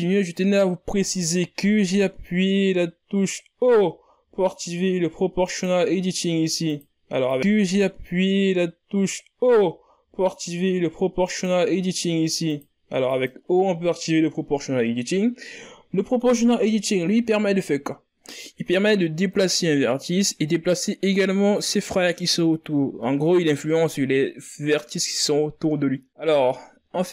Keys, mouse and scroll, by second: 6.3 o, 8.2 click, 9.4 click, 10.0 click, 16.2-19.4 drag, 23.2 scroll down 6, 26.3 click, 26.9 click.